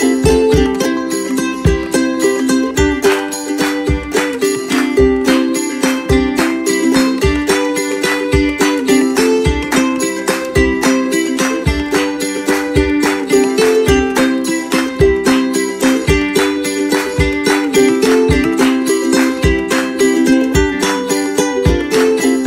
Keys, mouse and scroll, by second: 0.7 click, 0.8 Left, 0.9 Right, 1.1 Right, 1.2 click, 2.0 click, 2.1-2.9 typing, 3.3 click, 3.6 click, 4.1 click, 4.3-4.6 scroll down 1, 4.7 click, 5.2 click, 5.7 scroll up 1, 5.9 click, 5.9 Right, 6.2 scroll down 1, 6.3 click, 6.4 Right, 6.9 scroll up 1, 7.0 click, 7.4 click, 7.5 scroll down 1, 7.6 scroll, 7.6 scroll up 1, 7.8 click, 8.1 click, 8.4 ctrl+shift+Left, 8.4 ,, 8.6 Return, 8.6 click, 8.9 Return, 9.0 click, 9.2 click, 9.9 click, 10.2 click, 10.3 click, 11.0 click, 11.3 click, 11.6 click, 11.8 click, 13.5 click, 13.7 right click, 13.8 click, 14.0 right click, 14.1 click, 14.7 click, 15.3 click, 15.8 click, 16.2 Left, 16.4 shift+Right, 16.6 click, 17.2 click, 17.6 Return, 17.6 click, 18.3 click, 18.3 Return, 18.4 click, 20.5 click, 21.2 click.